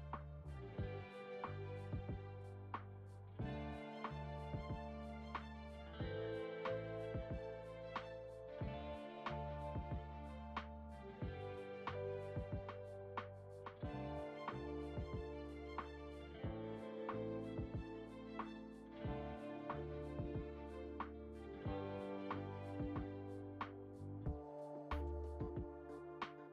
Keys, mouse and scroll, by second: 0.5 s, 2.5 ctrl+a, 3.7-5.3 scroll down 1, 5.3 click, 5.3-5.6 scroll down 2, 6.4-10.7 drag, 10.7-12.8 shift+middle drag, 12.8-13.5 scroll up 4, 13.5-14.3 scroll up 1, 14.3 click, 16.1-25.7 drag, 26.1-26.4 scroll down 1, 26.4-26.5 shift+middle drag.